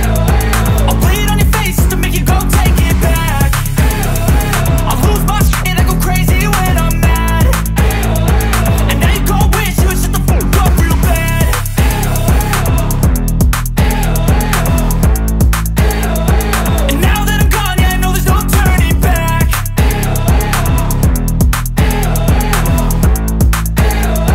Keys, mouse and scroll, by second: 0.8-8.4 drag, 11.3 click, 12.9-15.3 drag.